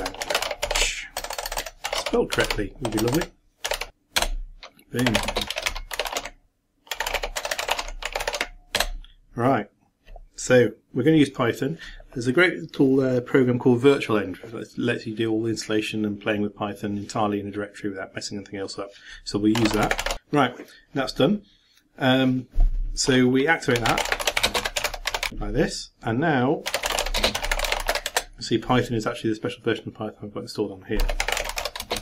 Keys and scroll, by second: 5.4-6.6 typing.